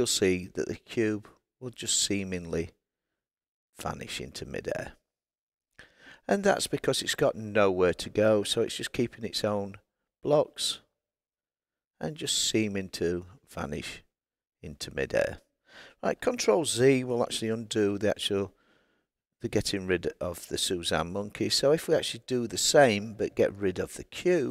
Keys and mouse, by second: 0.4 click, 10.8 click, 17.7 ctrl+z, 23.9 click.